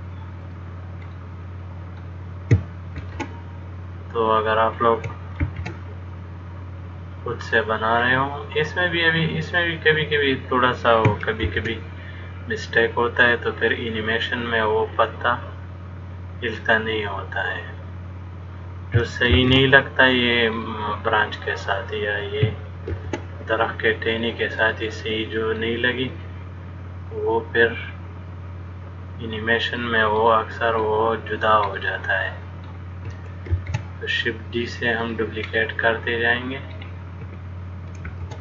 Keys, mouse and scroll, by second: 1.3 middle click, 3.2 shift+d, 5.7 shift+d, 8.3 middle click, 11.7 shift+d, 15.2 click, 19.6 shift+d, 20.8 middle click, 23.1 shift+d, 24.9 middle click, 26.4 click, 30.5 middle click, 33.7 shift+d, 35.8 middle click, 38.3 shift+d.